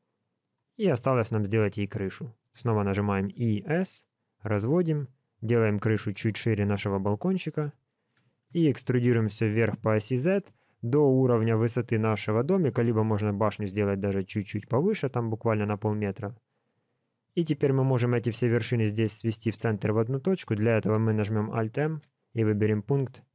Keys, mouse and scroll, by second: 1.6 middle click, 2.5 middle click, 3.1 e, 6.7 KP_1, 7.8 shift+middle click, 8.5 e, 20.3 middle click, 21.8 alt+m.